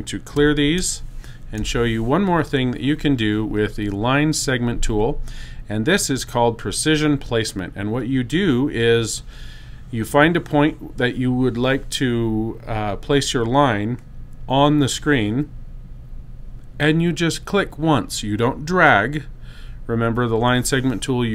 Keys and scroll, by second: 1.4 BackSpace.